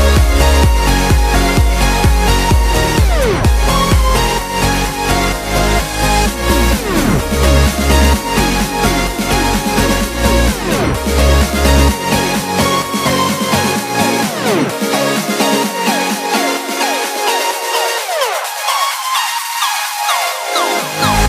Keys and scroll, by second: 0.4 alt+super+z, 0.8 alt+super+z, 1.1 alt+super+z, 1.4 alt+super+z, 1.7 alt+super+z, 2.0 alt+super+z.